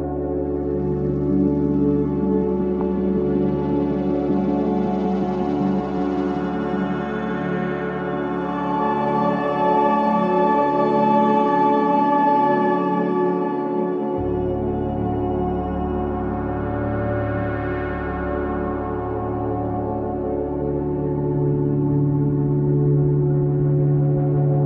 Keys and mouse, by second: 2.6 space, 3.7 click, 6.6 click, 8.8 k, 9.5 click, 10.3 Delete, 11.2-20.8 drag, 22.8 click, 23.8 1, 23.9 3, 24.4 0.